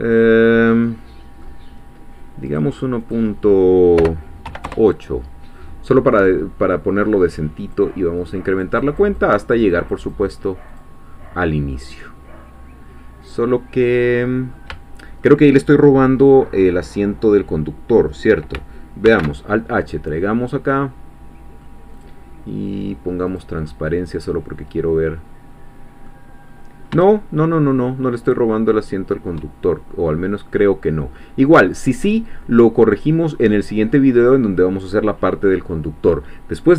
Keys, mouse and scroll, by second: 2.5 click, 3.3-4.5 middle drag, 4.0 BackSpace, 4.5 8, 4.7 Return, 7.6 click, 8.2-10.6 drag, 10.7 click, 11.5 scroll down 1, 11.8-15.4 middle drag, 19.1 alt+h, 19.8-21.9 middle drag, 21.9 click, 23.3 click, 23.7-26.5 middle drag, 26.5-26.9 scroll up 2, 27.1-29.9 shift+middle drag, 30.2-30.6 scroll down 2, 30.6-35.2 middle drag.